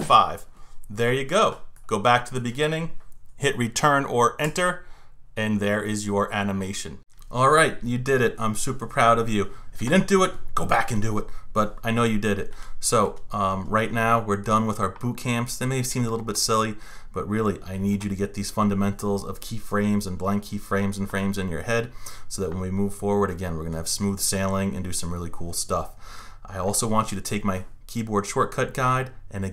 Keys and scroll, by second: 4.5 Return.